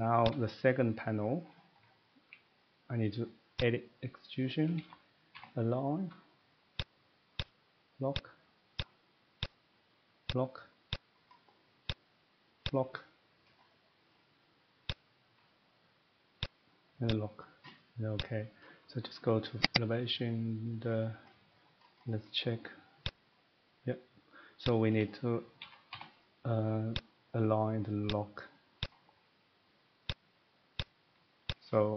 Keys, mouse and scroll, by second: 0.2 click, 1.4 middle click, 1.7-2.0 scroll down 2, 2.0 middle click, 2.6 middle click, 3.6 click, 4.8-5.3 typing, 6.7 click, 7.4 click, 8.1 click, 8.9 click, 9.4 click, 10.3 click, 10.9 click, 11.3 middle click, 11.4 middle click, 11.9 click, 12.6 click, 13.5 middle click, 13.6-14.1 scroll, 14.1 middle click, 14.9 click, 16.5 click, 17.1 click, 18.1 click, 19.7 click, 20.0 click, 21.1 middle click, 21.3 middle click, 21.3 scroll up 1, 21.4-22.0 scroll down 10, 22.0-23.1 scroll up 13, 23.3 click, 24.8 click, 25.0-25.4 scroll up 2, 25.4-27.2 middle click, 25.6-25.9 typing, 26.8 scroll, 26.9 click, 28.1 click, 28.8 click, 30.1 click, 30.8 click, 31.5 click.